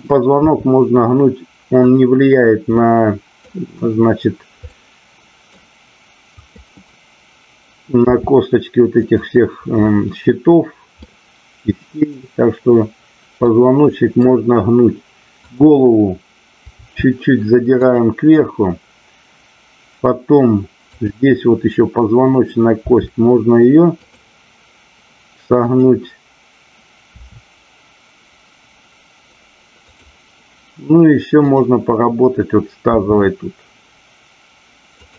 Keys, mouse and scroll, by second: 2.7-3.4 middle drag, 4.7-5.6 middle drag, 6.2-7.6 drag, 8.1 r, 9.1 click, 11.0-12.2 middle drag, 13.5-14.2 middle drag, 15.4 click, 16.7 r, 17.8 click, 20.9-21.9 drag, 22.8 r, 25.7-26.6 drag, 27.2 r, 29.8 click, 32.9 r.